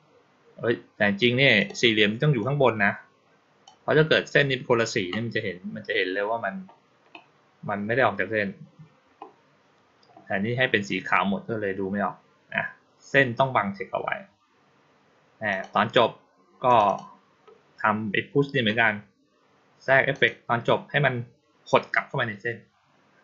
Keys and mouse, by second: 1.4 click, 2.3-3.5 drag, 15.4 click, 16.5 click, 16.7 click, 20.0 click.